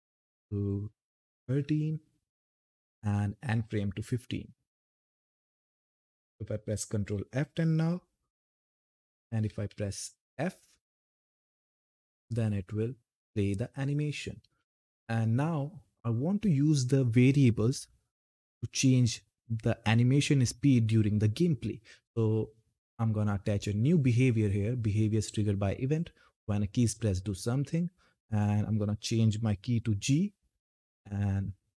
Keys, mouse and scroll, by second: 4.5 click, 6.9 ctrl+F10, 8.1 s, 12.0-12.5 typing, 15.0 typing, 23.1 click, 26.6 click, 29.6 g, 30.8 click.